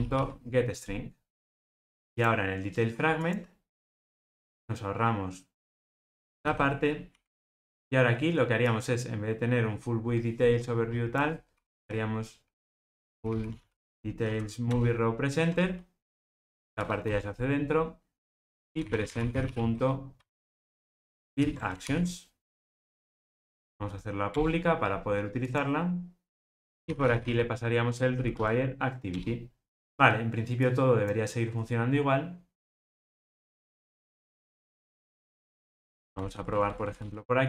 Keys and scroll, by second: 7.7 super+z, 14.7 Return, 21.7 ctrl+alt+o, 23.4 alt+Return, 29.1 Return, 29.8 ctrl+r.